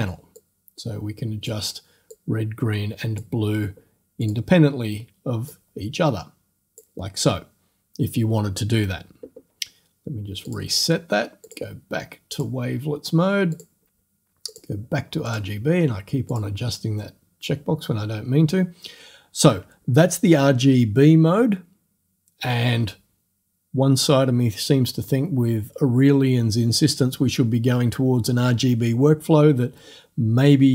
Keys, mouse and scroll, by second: 0.4-1.7 drag, 2.1-3.4 drag, 4.2 click, 5.5-7.0 drag, 10.5 click, 11.5 click, 12.4 click, 13.6 click, 13.8-14.5 scroll up 1, 14.5 click, 14.8 scroll up 1, 15.3 click, 16.3 click.